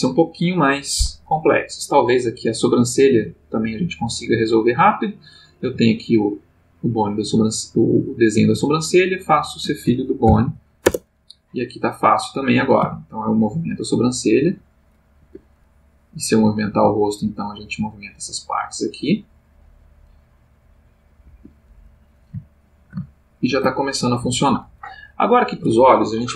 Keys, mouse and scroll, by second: 2.7 click, 5.1 click, 5.6 g, 7.2 Escape, 9.0 shift+click, 10.2 ctrl+p, 12.1 click, 12.8 g, 15.2 Escape, 15.9 click, 16.7 g, 21.2 Escape, 22.5-24.3 ctrl+middle drag.